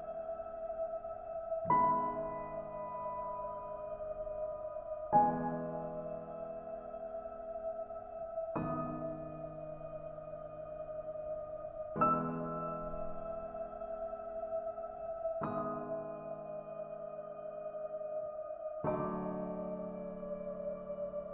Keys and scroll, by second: 6.2 ctrl+a.